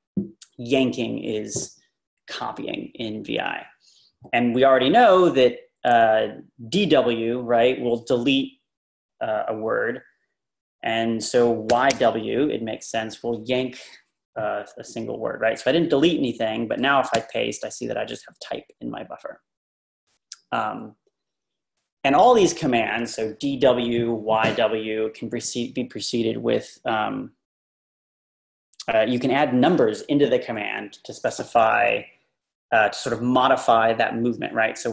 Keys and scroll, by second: 11.5-12.4 typing, 17.2 shift+p, 22.6 Down, 23.0 Left.